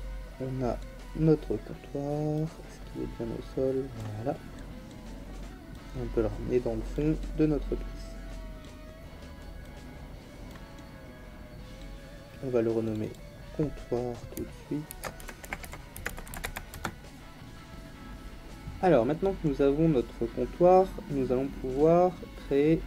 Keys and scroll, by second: 14.9-16.4 typing, 16.7 Return.